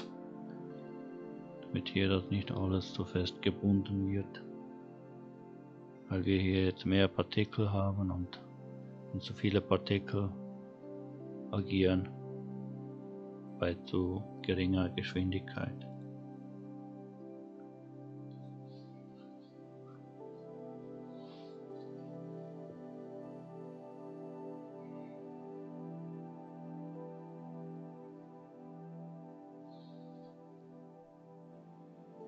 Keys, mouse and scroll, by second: 6.5-8.0 scroll up 2, 15.9 click, 21.6-24.6 scroll up 2.